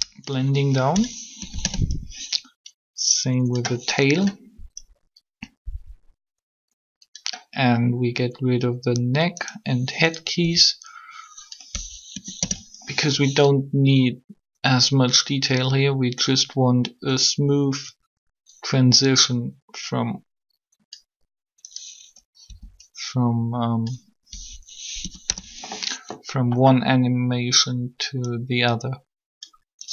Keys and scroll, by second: 1.4 Delete, 1.6 Return, 10.4 b, 12.1 Delete, 12.4 Return, 22.3 b, 24.9 Delete, 25.0 Return.